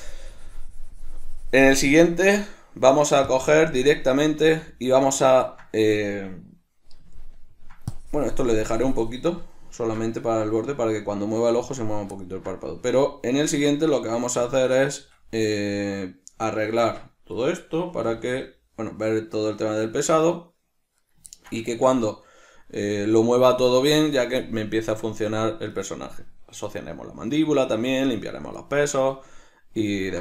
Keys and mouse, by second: 2.4-3.6 ctrl+middle drag, 3.6-5.4 drag, 4.7 z, 5.4-8.2 ctrl+middle drag, 8.2-12.4 drag, 10.1 ctrl+z, 12.4-15.9 ctrl+middle drag, 13.6 Tab, 16.5 right click, 17.0 Tab, 17.6 right click, 18.4 g, 21.4 right click, 21.6-26.0 ctrl+middle drag, 26.0 right click, 29.0-30.2 middle drag.